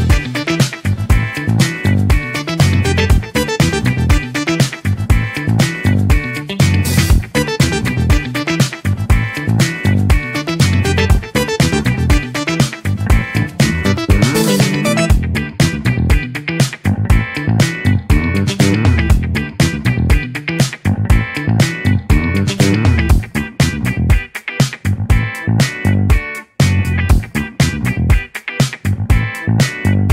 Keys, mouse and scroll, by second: 0.9 Tab, 2.4 click, 3.8 click, 4.4 click, 5.0 alt+click, 5.6 alt+click, 5.8 alt+click, 6.2 alt+click, 6.5 alt+click, 6.7 alt+click, 8.2 alt+click, 9.3-10.8 alt+drag, 11.5 alt+click, 11.9 alt+click, 12.2 alt+click, 12.7 alt+click, 13.3 alt+click, 13.9 click, 15.7 alt+click, 16.8 click, 18.9 alt+shift+click, 19.2 alt+shift+click, 19.6 alt+shift+click, 19.8 alt+shift+click, 20.3 alt+shift+click, 20.5 alt+click, 20.8 alt+click, 21.0 alt+click, 21.2 alt+click, 21.5 alt+click, 21.8 alt+click, 24.6 click, 29.0 Tab.